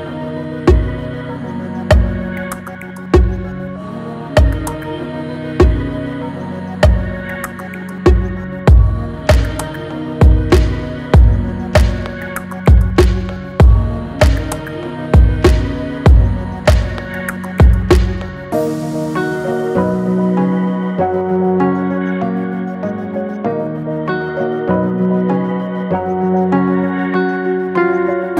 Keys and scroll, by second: 14.2 ctrl+t.